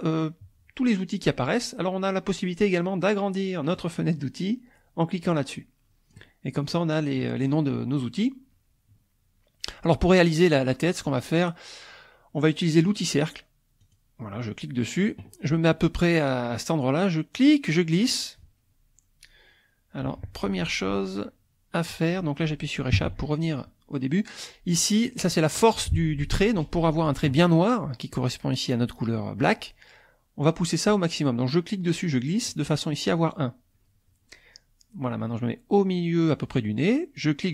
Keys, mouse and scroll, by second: 3.7-6.3 drag, 13.8 click, 17.3-22.1 drag, 22.9 Escape, 30.9-32.7 drag, 37.3-37.5 drag.